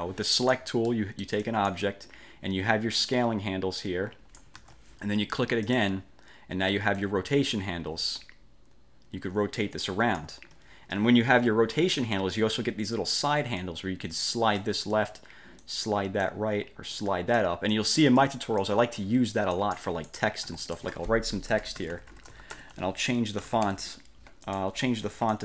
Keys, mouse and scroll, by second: 1.1-2.0 drag, 3.3-4.7 drag, 4.7 ctrl+z, 5.8 click, 7.1-10.5 drag, 13.7-14.9 drag, 15.7 click, 17.1 click, 17.8-18.5 drag, 18.7 click, 19.7 click, 20.5 F8, 20.8 click, 21.4-24.4 typing, 24.6 click.